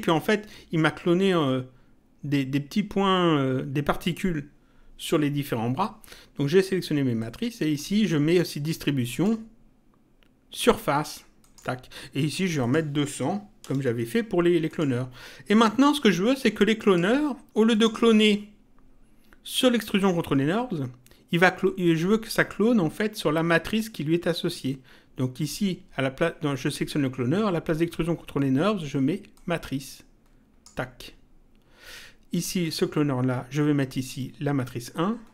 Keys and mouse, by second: 7.2 click, 9.1 click, 11.4 click, 12.6 click, 14.7 click, 16.0 click, 17.7 click, 29.3 click, 32.6 click, 34.6 click.